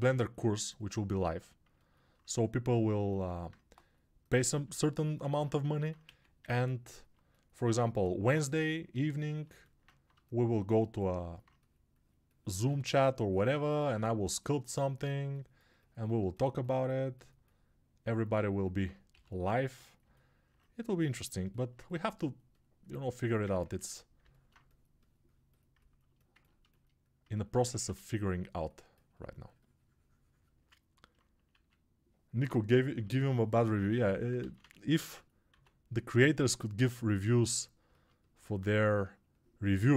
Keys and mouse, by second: 23.3 right click, 23.7 ctrl+r, 34.5 ctrl+z.